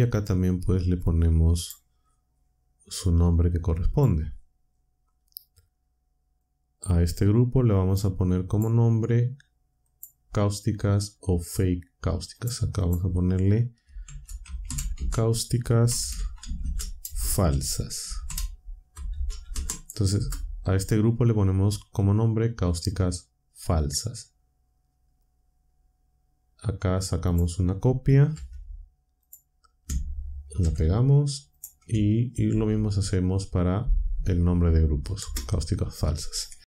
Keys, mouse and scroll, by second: 0.9-1.8 drag, 2.0-2.5 scroll down 1, 3.0-4.1 drag, 6.4-8.1 drag, 8.5 click, 9.8 click, 12.3 click, 12.8 click, 13.8-20.0 typing, 20.1 Return, 27.2 click, 28.3 c, 29.2 click, 30.5 ctrl+v, 31.5 click, 32.4 ctrl+v, 35.2 Return.